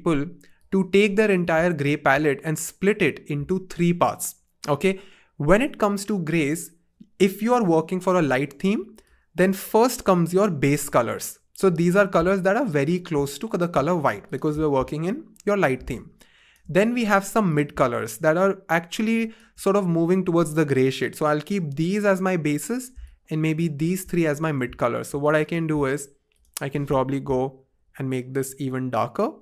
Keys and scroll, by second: 10.1 BackSpace, 27.7 shift+Down, 27.9 shift+Down, 28.4 shift+Down.